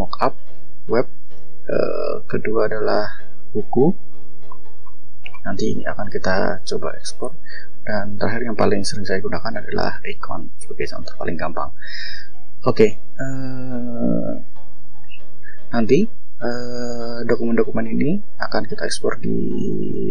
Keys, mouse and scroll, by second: 0.2 scroll up 2, 1.8 click, 2.8 click, 3.6-4.7 shift+scroll down 6, 4.9-6.5 shift+scroll up 8, 8.1 click, 9.2 click, 10.3 click, 14.5 click, 15.2 click, 17.8 click, 18.7 click.